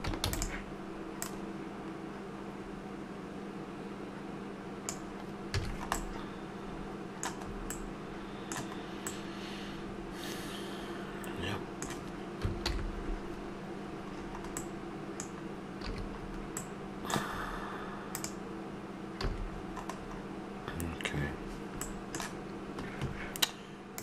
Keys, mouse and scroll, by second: 0.2 shift+d, 1.2-3.1 drag, 3.1 middle click, 5.5 a, 5.6-6.9 middle drag, 7.7-10.9 middle drag, 12.6 alt+h, 14.8-16.8 middle drag, 15.9 a, 17.3 middle click, 18.1-18.5 right drag, 19.2 a, 20.1-21.8 middle drag.